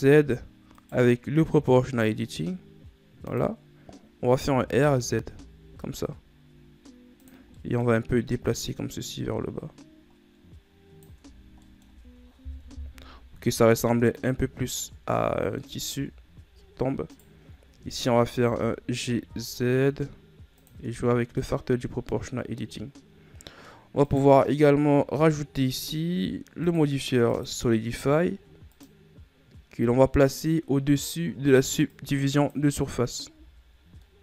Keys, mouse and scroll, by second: 3.8 click, 5.1 r, 8.1 middle click, 9.1 click, 11.8 Tab, 12.0-12.3 scroll down 1, 12.3 middle click, 12.5 a, 13.2 KP_1, 14.6-15.5 scroll up 2, 15.5 scroll down 3, 15.7 scroll up 1, 15.8-16.6 middle drag, 16.6 Tab, 17.7 right click, 18.2-18.7 scroll down 3, 18.7 g, 21.4 Tab, 21.7 scroll down 2, 22.0-24.7 middle drag, 24.7 right click, 27.2-33.1 drag, 33.9 a, 34.1-34.2 scroll down 2.